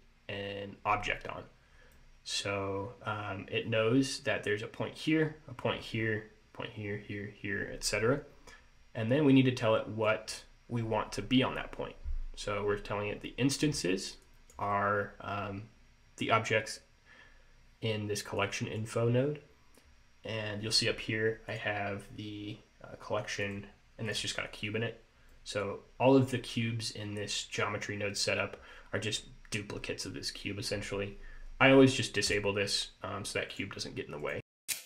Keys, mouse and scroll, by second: 2.0 middle click, 5.9 scroll up 1, 9.7 click, 14.3 click, 18.5 click, 21.6 click, 23.6 click, 24.2 click, 25.4 middle click, 29.3-32.4 scroll up 2, 32.4 click, 33.6 click, 34.3 click.